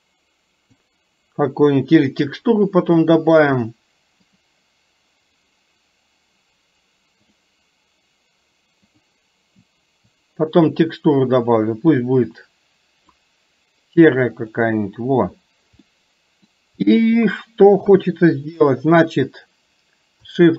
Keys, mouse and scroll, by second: 5.0 click, 15.9 middle click, 17.9 KP_3.